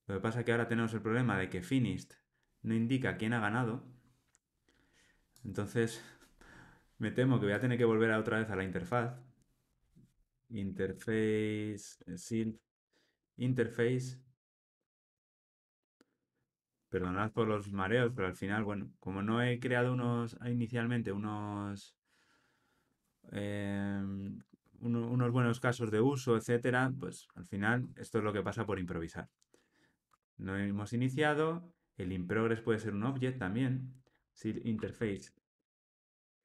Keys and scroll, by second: 14.2 Return, 16.8 Delete, 30.1 Tab.